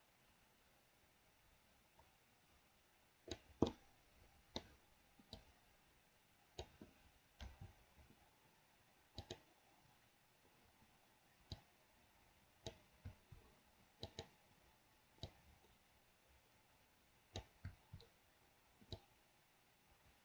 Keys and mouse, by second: 4.0 middle click, 5.8 right click, 5.9-7.0 drag, 9.4 click, 12.0-13.1 drag, 14.3 click, 15.7-17.9 drag, 19.2-20.2 middle drag.